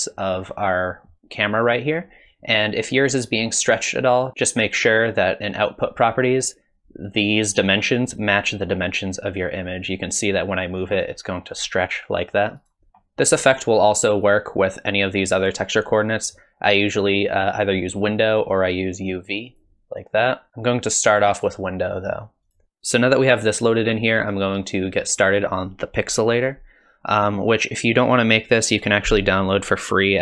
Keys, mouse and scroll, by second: 4.3 click, 10.2 click, 12.9 middle click, 12.9-14.1 scroll down 3, 14.3 click, 18.6 click, 20.5 click, 21.9 middle click, 22.5 click.